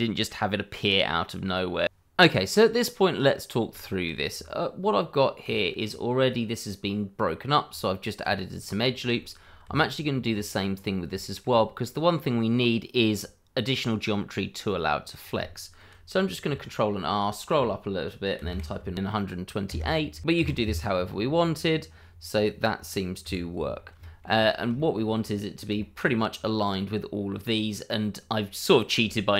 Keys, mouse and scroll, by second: 0.5 click, 0.6 middle click, 0.9 shift+middle click, 0.9 scroll up 1, 1.1 Tab, 1.2 scroll down 1, 1.3 middle click, 1.4 scroll up 1, 1.5 shift+middle click, 2.3 scroll up 1, 3.7 shift+middle click, 4.3 Tab, 5.8 scroll up 1, 7.6 Tab, 8.5 click, 8.8 scroll down 1, 9.2 shift+middle click, 9.6 Tab, 10.7 scroll up 1, 11.2 shift+middle click, 11.8 middle click, 14.2 scroll down 1, 14.8 scroll up 1, 15.7 scroll down 1, 16.4 ctrl+r, 17.0-17.3 scroll up 1, 18.4 KP_1, 18.7 KP_8, 20.3 Tab, 23.2 Escape, 23.7 scroll up 1, 24.0 shift+middle click, 24.3-24.7 scroll up 1, 24.7 shift+middle click, 25.0-25.7 scroll up 1, 25.8 shift+middle click, 27.4-27.9 scroll down 1, 29.0 shift+middle click.